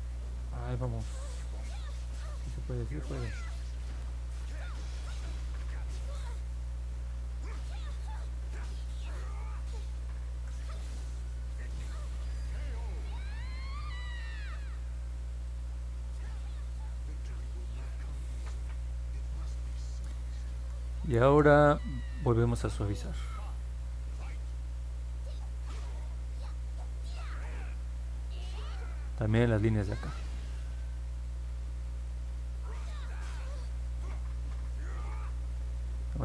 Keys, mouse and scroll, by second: 0.3 ctrl+z, 1.4 click, 2.2 click, 3.2 click, 4.5 click, 7.6 click, 8.3 ctrl+z, 8.8 click, 10.2 ctrl+z, 11.2 click, 14.7 click, 15.5 click, 17.5 click, 24.1 click, 24.8 click, 25.7 click, 26.2 click, 26.8 click, 28.0 click, 28.5 click, 29.2 click, 29.9 click, 31.4 click, 32.0 click, 32.9 click, 34.5 middle click, 34.8 middle click, 35.8 alt+middle click.